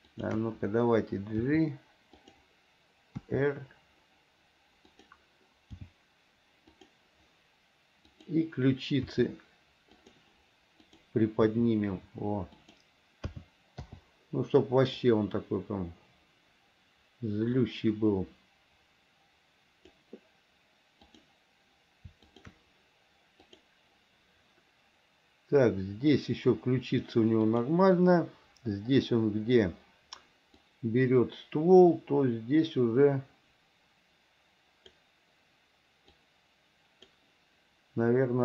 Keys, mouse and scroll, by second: 0.2 shift+click, 1.7 g, 3.4 r, 6.0 g, 8.4 click, 9.3 r, 11.0 click, 11.7 r, 13.5 a, 14.1 i, 15.2-20.2 drag, 22.5 shift+click, 23.7 click, 27.7 click, 30.8-35.2 drag, 36.4 click.